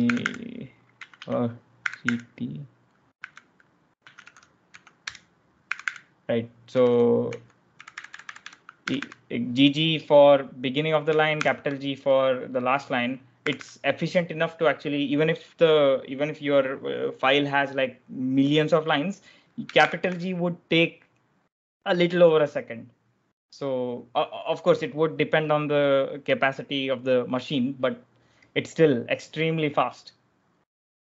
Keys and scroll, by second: 0.0-9.3 typing, 11.3 shift+g, 13.2 typing, 19.6 shift+g.